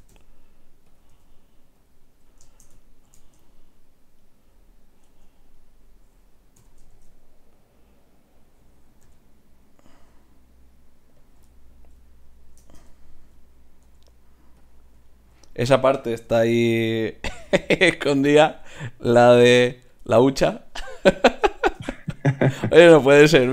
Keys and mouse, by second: 1.1 g, 1.9-4.2 drag, 2.5-6.6 right drag, 5.0 Tab, 6.6 g, 9.1 g, 13.9 g, 16.2 r, 17.0-18.7 drag, 17.5 r, 18.6 r, 18.7-19.8 right drag.